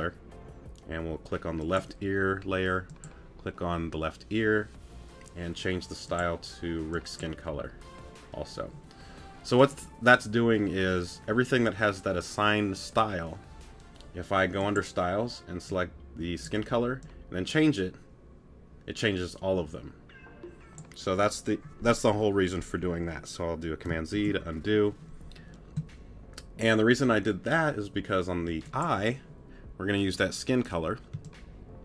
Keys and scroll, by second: 31.1 space.